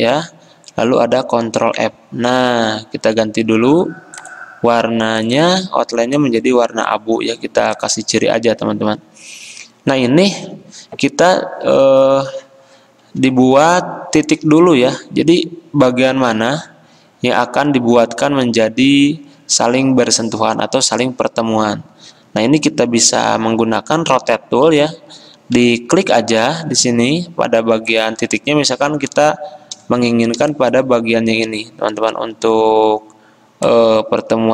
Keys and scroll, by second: 1.6 ctrl+f, 24.2 r.